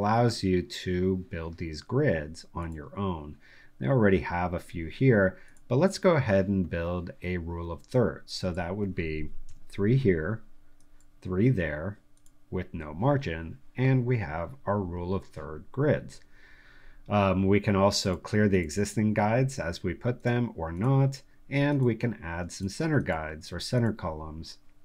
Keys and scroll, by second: 9.4 3.